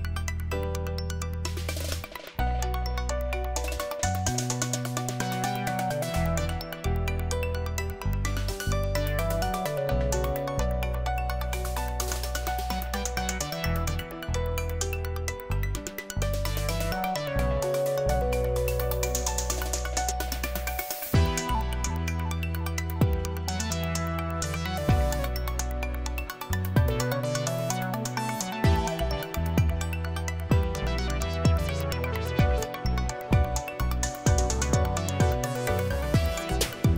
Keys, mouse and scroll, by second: 3.7 click, 7.8 click, 8.9 click, 9.3-10.6 typing, 11.3 Return, 17.3 click, 18.6 click, 20.2 click, 22.0 click, 24.0 click, 24.4 click, 28.6 Return.